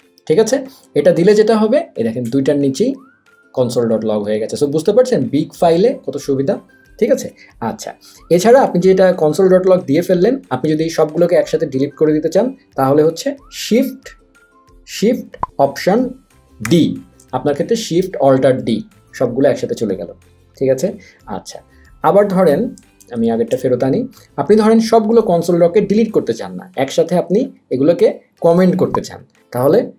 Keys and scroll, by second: 16.8 alt+shift+d, 23.1 super+z.